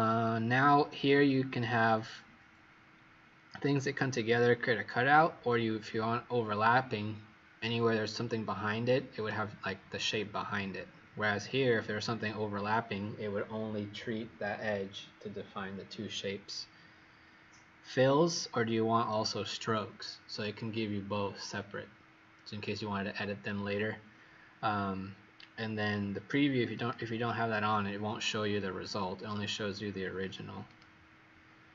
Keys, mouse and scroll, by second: 26.7 click.